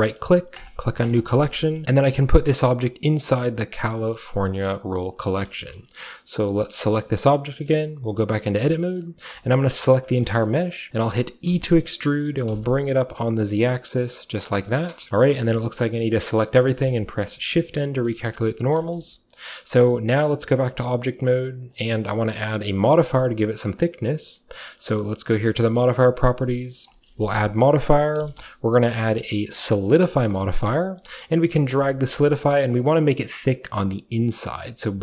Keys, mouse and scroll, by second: 0.6 click, 1.0 click, 1.8 ctrl+v, 1.9-3.7 drag, 3.9 click, 5.3-6.9 middle drag, 7.4-8.8 middle drag, 7.4-10.1 scroll down 2, 9.0-10.1 shift+middle drag, 9.3 a, 9.5 a, 10.2 shift+middle click, 10.3-11.5 shift+scroll up 1, 10.5-11.9 shift+middle drag, 11.5-11.9 shift+scroll up 1, 11.5 e, 12.5 z, 14.3-16.7 drag, 14.3-15.6 typing, 16.7 typing, 17.1-20.7 scroll up 1, 17.3 middle click, 17.5 middle click, 18.1 middle click, 18.3 middle click, 18.5 middle click, 19.0-20.7 middle drag, 20.4-21.2 typing, 21.7 click, 25.7 click, 26.9 click, 28.4 typing, 29.9 click, 30.4 ctrl+s, 31.6 middle click, 31.6 scroll down 1, 32.4-35.0 shift+drag.